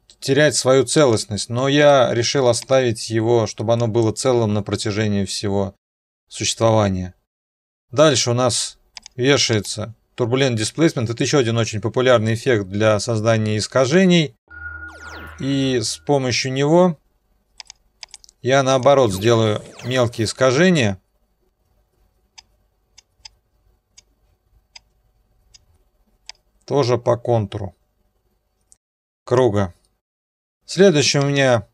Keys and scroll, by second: 1.8 Delete, 19.4-20.3 typing.